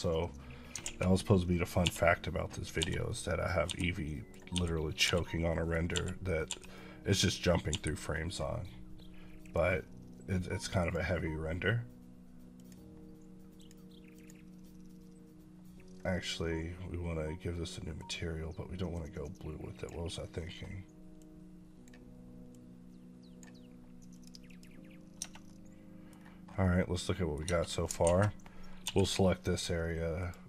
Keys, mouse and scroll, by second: 0.9 a, 1.7 l, 3.0 middle click, 3.8 middle click, 5.1 middle click, 6.9 middle click, 9.3-19.7 drag, 21.4-22.0 drag, 22.7-23.3 drag, 24.9 click, 25.3-26.3 middle drag, 26.3 scroll down 2, 26.5 middle drag, 27.3 Tab, 27.9 a, 28.7 l, 30.1 click.